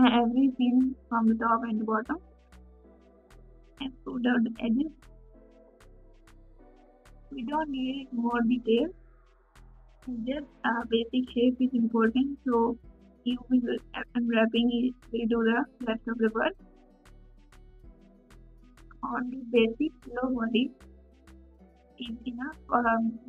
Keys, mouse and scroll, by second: 0.2 click, 0.4 g.